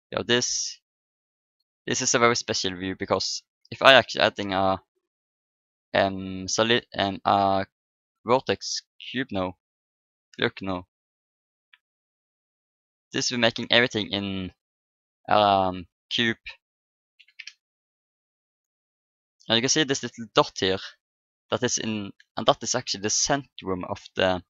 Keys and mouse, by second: 0.5-2.3 drag, 4.5 shift+a, 8.8-15.0 drag, 17.2 Delete, 18.5-20.2 drag, 20.2-21.8 middle drag.